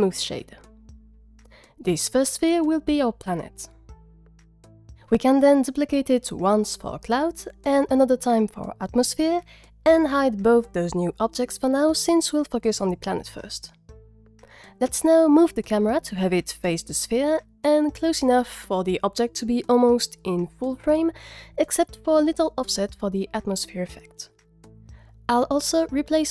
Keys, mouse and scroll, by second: 1.8-3.4 scroll up 5, 3.4 F2, 6.4 shift+d, 6.8 right click, 7.0 F2, 8.0 shift+d, 8.2 right click, 8.4 F2, 10.6 click, 12.1 click, 13.5 click, 15.3 scroll down 1, 15.4-16.0 scroll down 4, 16.0 click, 16.0 scroll down 1, 16.6 alt+g, 16.7 alt+r, 17.2-17.8 typing, 17.5 Return, 18.5 click, 19.3 click, 20.1 click, 20.6 g, 20.6 z, 20.8 z, 21.2 click, 26.1 click.